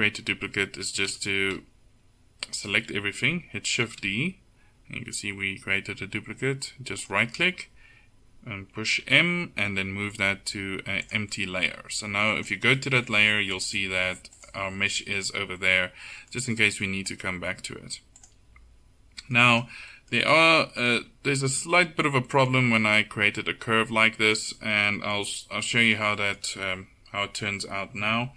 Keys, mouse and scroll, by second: 1.2 a, 3.9 shift+d, 9.1 m, 19.6 right click, 20.4 Tab, 21.1 Tab.